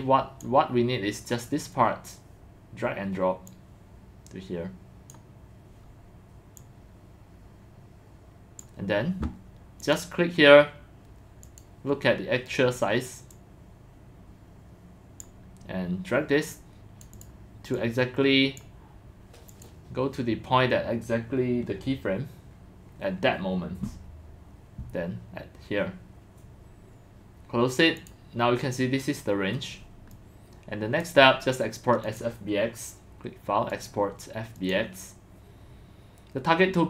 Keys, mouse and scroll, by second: 3.5-5.1 drag, 6.6 click, 7.0-8.6 drag, 9.8 click, 11.4 click, 11.5 click, 13.3-15.2 drag, 16.5 click, 17.1 click, 17.8 click, 19.5 click, 28.0 click, 28.4 drag, 30.1-31.0 drag, 32.0 click, 33.7 click, 34.6 click, 35.9 drag, 36.3 click.